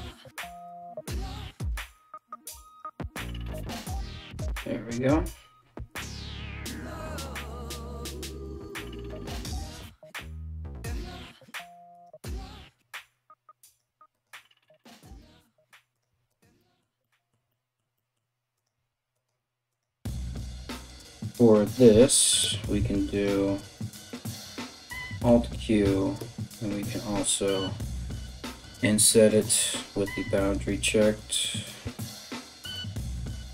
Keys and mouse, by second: 1.7-6.7 middle drag, 1.7 right click, 2.2 right click, 2.7 shift+right click, 3.3 f, 4.5 right click, 4.7 f, 5.6 z, 6.7 ctrl+z, 7.4 g, 8.1 middle click, 8.9 right click, 9.0-11.5 middle drag, 9.2 g, 11.5 right click, 11.6-13.2 middle drag, 11.6 g, 13.2 right click, 13.3-15.5 middle drag, 13.4 g, 15.5 right click, 15.6-18.1 middle drag, 15.7 g, 18.1 right click, 18.2-19.3 middle drag, 18.3 g, 19.3 right click, 19.4-23.0 middle drag, 19.4 g, 20.6 3, 21.3 right click, 21.8 shift+right click, 22.7 shift+right click, 23.0 right click, 23.3 right click, 24.1 alt+q, 25.5 right click, 30.0 click, 31.4-33.5 alt+middle drag, 31.5 alt+s, 32.7 alt+q.